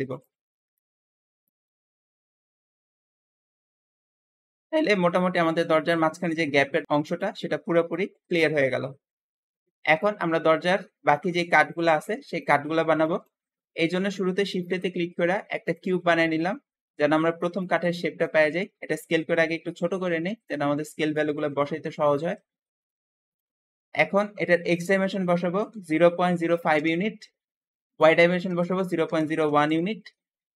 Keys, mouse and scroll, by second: 0.7 click, 1.6 s, 1.6 s, 1.7 x, 3.4 click, 3.9-4.3 scroll down 4, 4.3 middle click, 4.6 Tab, 5.0-9.8 shift+middle drag, 7.6 Escape, 8.3 Escape, 9.8 shift+click, 10.7 scroll down 3, 11.0-13.3 shift+middle drag, 13.3-13.8 scroll up 2, 13.8 shift+middle click, 14.2 shift+a, 16.3-17.4 scroll down 4, 17.5 click, 18.7 s, 18.8 s, 20.6 scroll up 5, 21.0-22.0 shift+middle drag, 22.0 shift+click, 23.0-24.6 shift+middle drag, 24.6-27.6 shift+drag, 25.4-26.6 typing, 26.7 Return, 27.8 click, 28.3-29.3 typing, 29.4-30.5 drag, 29.5 Return.